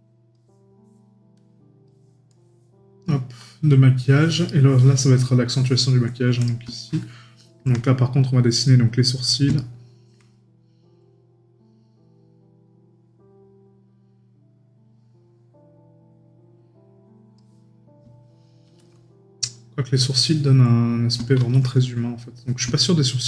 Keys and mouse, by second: 4.5 right click, 6.8 right click, 22.8 right click.